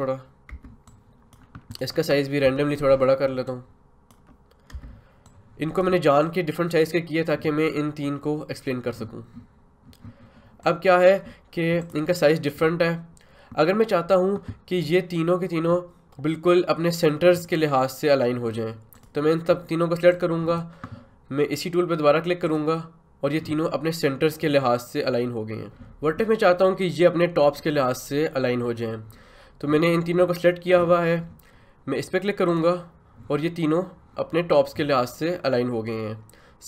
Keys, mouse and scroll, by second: 0.5 Return, 0.9 click, 2.4 ctrl+t, 3.4 shift+click, 4.7 Return, 5.2-18.9 drag, 32.5 click.